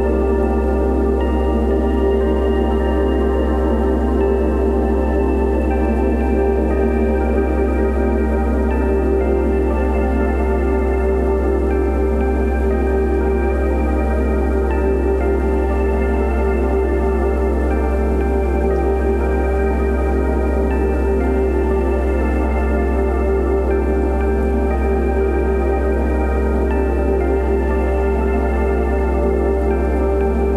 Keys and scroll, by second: 1.3 space, 4.1 [, 5.1 [, 6.6 ], 8.6 space, 10.2 space, 11.7 space, 12.4 [, 12.8 ], 16.1 space, 21.3 space, 23.4-27.2 typing, 28.5 [.